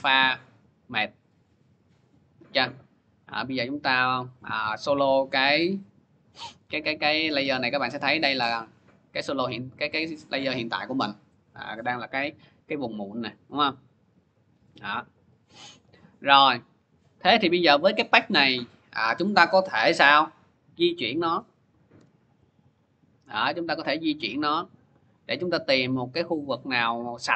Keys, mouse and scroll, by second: 0.0 click, 1.2 click, 3.0 click, 4.7 click, 6.8-7.3 scroll, 7.3-7.7 scroll, 8.2-9.3 scroll, 9.3-9.7 scroll, 10.5-11.8 scroll, 13.9 click, 14.3 middle click, 15.6 click, 16.8 click, 17.3 click, 21.8 v, 23.4 v.